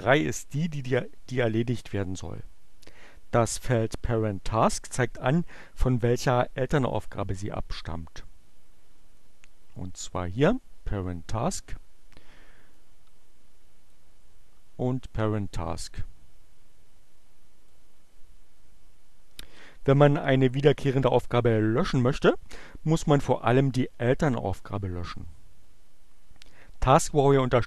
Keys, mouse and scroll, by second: 9.2-10.4 drag, 12.8-14.1 drag, 15.9-18.0 drag.